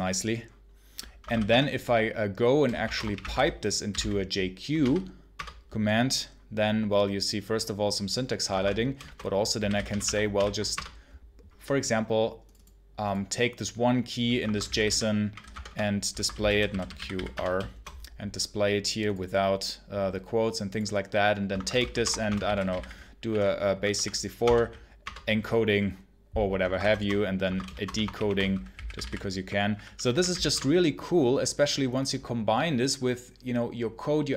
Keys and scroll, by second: 0.9-4.7 typing, 5.2 Return, 8.4 Escape, 8.4-10.4 typing, 10.6 Return, 14.1-17.3 typing, 21.3-24.3 typing, 24.9 Return, 26.5 Escape, 26.6-30.7 typing.